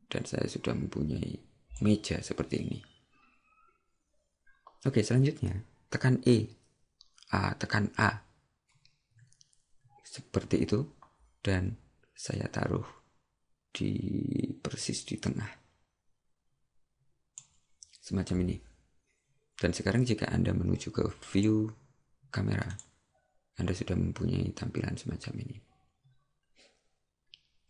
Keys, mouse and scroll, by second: 9.2 a, 12.4 click, 21.4 click.